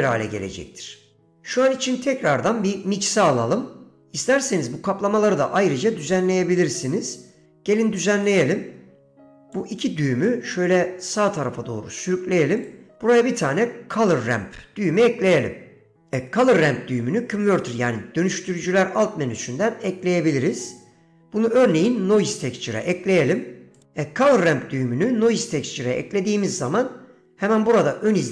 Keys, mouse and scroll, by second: 8.4-8.9 middle drag, 9.4 click, 10.5-11.6 drag, 12.2 middle click, 12.8 click.